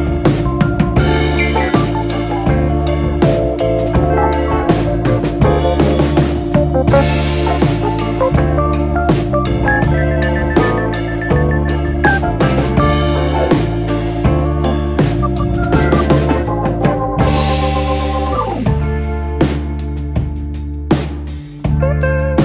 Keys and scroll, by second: 21.2 z.